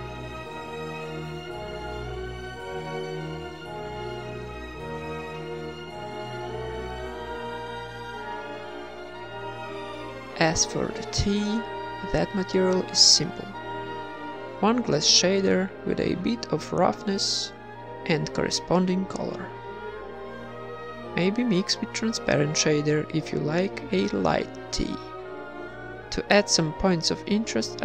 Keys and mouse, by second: 1.5 shift+a, 3.9 middle click, 4.8-6.0 drag, 5.6 KP_0, 6.3 middle click, 6.9 click, 8.5 click, 8.6 x, 8.8 shift+a, 11.0 click, 11.2 z, 13.2-14.2 middle drag, 14.6 click, 16.2 click, 17.6-18.6 drag, 19.6 ctrl+s, 20.2-21.2 drag, 22.5 ctrl+v, 22.8 ctrl+s, 25.2 ctrl+s, 25.2 KP_1, 25.2 KP_5, 25.4 z, 26.1 click.